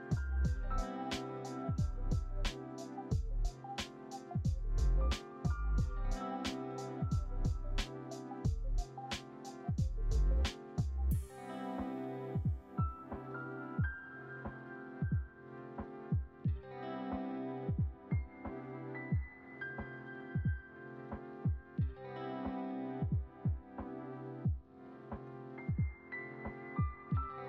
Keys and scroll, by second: 0.1 alt+x, 1.1 ctrl+c, 1.3 ctrl+v, 1.6 alt+x, 2.9 ctrl+c, 3.0 ctrl+v, 8.7 space, 14.0 Delete, 17.9 Delete, 20.0 space, 21.5 s.